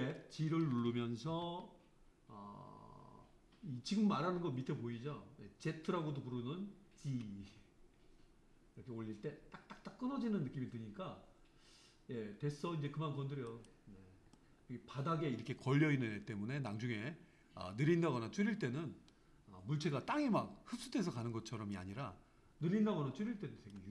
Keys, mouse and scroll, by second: 1.3 g, 14.4-17.4 middle drag.